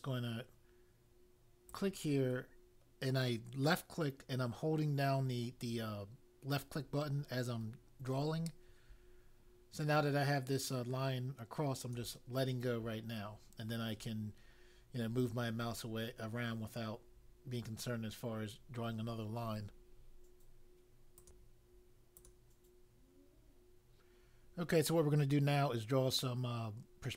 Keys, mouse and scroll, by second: 1.6 click, 21.2 click, 22.1 click.